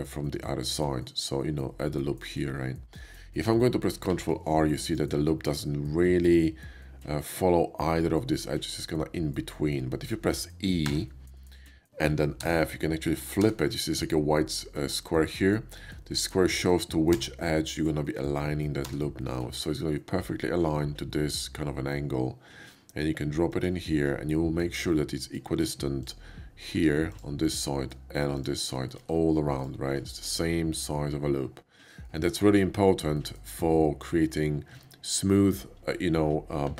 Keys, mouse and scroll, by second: 4.1 ctrl+r, 4.8 click, 10.9 e, 12.2 f, 17.2 f, 23.5 click, 23.9 middle click, 25.0 middle click, 25.7 Tab, 26.0 click, 27.1 click, 27.5 middle click, 28.2 shift+click, 28.7 shift+middle click, 29.5 alt+click, 30.0 alt+middle click, 30.8 alt+middle click, 34.8 Tab, 36.5 ctrl+2.